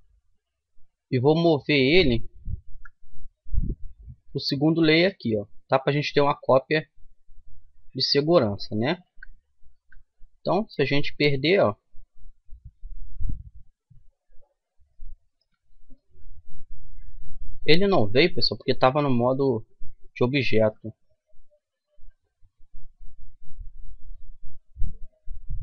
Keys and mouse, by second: 1.3-3.1 drag, 2.7 m, 9.1 Tab, 9.7 Tab, 10.8-12.6 drag, 13.5-16.7 middle drag, 16.0 Tab, 17.6-19.3 drag, 18.3 Tab, 19.1 a, 19.6 a, 20.6 m.